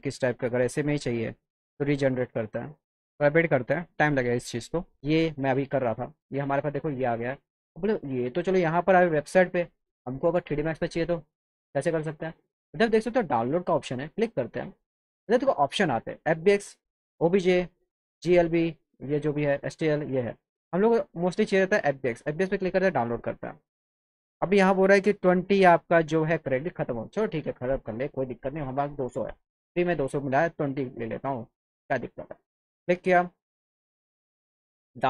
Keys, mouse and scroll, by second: 1.4 click, 5.0-6.1 alt+drag, 6.4 alt+click, 7.3 alt+click, 11.8-12.2 scroll down 2, 13.5 click, 16.8 click, 17.7 click, 18.6 click, 19.3 click, 19.8 click, 20.6 click, 22.2 click, 31.1 click.